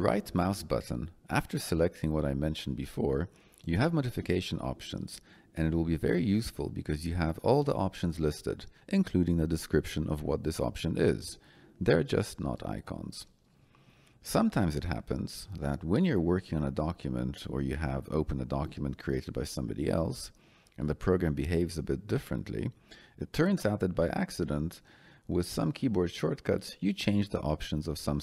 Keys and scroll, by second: 0.9 Escape, 15.5 Escape.